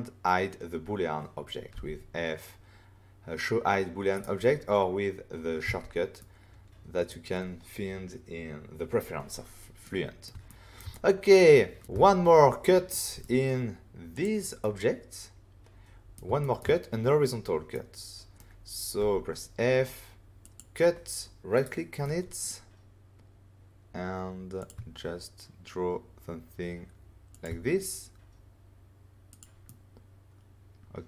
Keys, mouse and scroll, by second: 1.7 f, 4.1 right click, 5.6 right click, 5.6 <, 6.1 middle click, 9.8 middle click, 10.4 ctrl+middle click, 10.9 middle click, 11.9 <, 12.9 middle click, 14.1 click, 14.6 middle click, 16.3 shift+middle click, 17.7 middle click, 18.9 f, 20.4 click, 21.5 right click, 22.0 middle click, 23.7-24.5 scroll down 1, 24.5 click, 27.3 shift+click, 27.4 shift+click, 29.2 click, 29.3 click, 29.6 middle click.